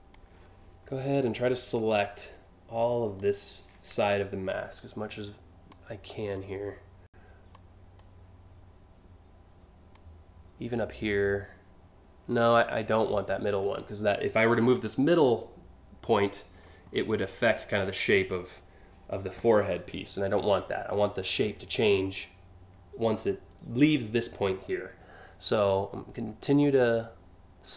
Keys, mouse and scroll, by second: 5.3-6.0 shift+drag, 7.1-7.6 shift+drag, 9.5-12.9 shift+drag, 26.2-27.5 shift+drag.